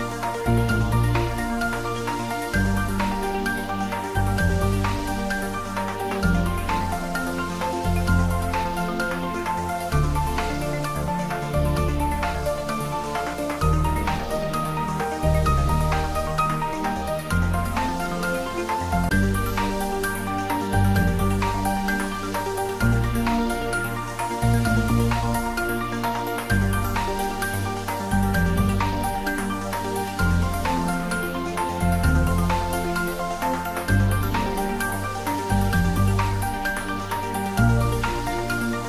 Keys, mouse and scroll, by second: 0.4 click, 1.3 3, 2.1 scroll down 1, 2.5-4.2 middle drag, 4.2 g, 4.5 z, 6.1 click, 6.7 middle click, 7.4-8.1 scroll down 1, 9.1 ctrl+r, 10.0 click, 16.9 click, 17.3-17.6 scroll down 1, 17.6 middle click, 20.0-20.4 ctrl+scroll down 1, 20.9 ctrl+r, 22.2 click, 28.4 click, 29.3 3, 30.7 g, 31.0 z, 33.3 click, 33.6 scroll down 1, 34.7 middle click, 35.4 click, 36.2 2, 37.4 click, 38.3 shift+click.